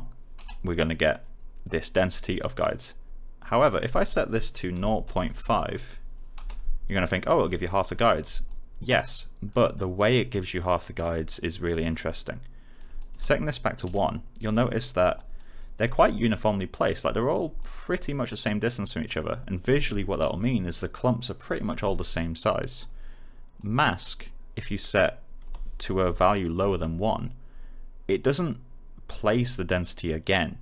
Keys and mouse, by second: 0.3 Return, 0.8 click, 3.4 click, 4.7-5.8 typing, 6.3 Return, 7.3 click, 9.1 alt+right click, 9.7 alt+click, 11.3 alt+right click, 12.7 click, 13.0 1, 13.8 Return, 14.4 click, 15.5 alt+right click, 15.9 alt+click, 23.5 click, 25.4-27.0 typing.